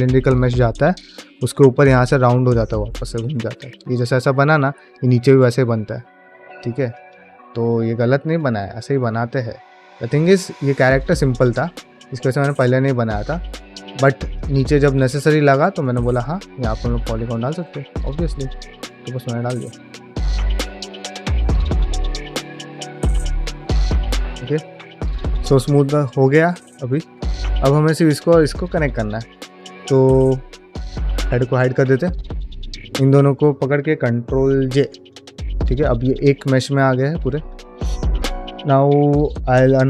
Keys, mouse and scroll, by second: 7.2 shift+click, 7.5 shift+click, 8.3 middle click, 8.6-10.5 shift+drag, 10.7 middle click, 11.0 shift+click, 11.7-12.9 shift+drag, 13.1 middle click, 13.4 shift+middle click, 14.2 middle click, 15.0 shift+click, 15.5 middle click, 15.9 ctrl+middle click, 16.2 ctrl+middle click, 16.8 shift+click, 17.4 ctrl+middle click, 17.6 shift+middle click, 17.9 f, 18.3 shift+click, 19.3 middle click, 19.6 shift+click, 20.1 shift+click, 20.5 shift+click, 20.7 shift+click, 21.1 middle click, 21.6 ctrl+middle click, 21.8 shift+middle click, 22.1 shift+click, 23.0 shift+middle click, 23.4 shift+click, 24.0 middle click, 24.4 shift+click, 24.7 shift+middle click, 25.0 middle click, 25.3 ctrl+Tab, 25.7 ctrl+middle drag, 26.0 middle drag, 26.3 click, 26.6 ctrl+shift+middle click, 26.9 ctrl+middle click, 27.1 middle click, 27.5 click, 29.7 ctrl+shift+middle click, 31.5 click, 32.1 drag, 32.8 shift+drag, 34.5 ctrl+j, 34.9 click, 35.4 ctrl+middle click, 35.7 click, 35.9 Tab, 37.3 click, 37.6 middle click, 37.9 shift+middle click.